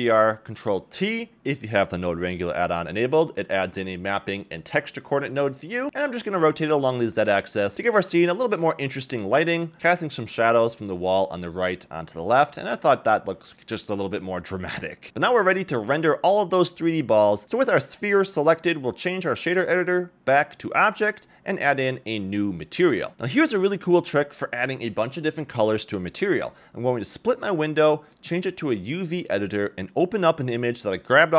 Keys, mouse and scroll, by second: 0.0 click, 0.9 ctrl+t, 1.5-1.8 scroll down 3, 1.8 middle click, 2.2 scroll up 1, 3.3-3.8 scroll up 1, 3.8 click, 4.2-4.5 scroll up 2, 4.5 middle click, 4.7 scroll down 1, 5.0 click, 5.7 click, 6.6-7.0 drag, 7.2 drag, 8.1-12.4 drag, 15.5 scroll down 1, 16.0-16.5 shift+middle drag, 17.0 click, 18.0 shift+middle drag, 18.3 click, 19.5-20.5 drag, 21.4-22.3 scroll down 2, 22.3 click, 22.9-23.3 scroll down 2, 23.1 middle click, 23.5-24.0 scroll up 1, 25.6 click, 26.9 scroll down 1, 27.1 middle click, 27.6 middle click, 28.9-30.1 drag, 31.2 click.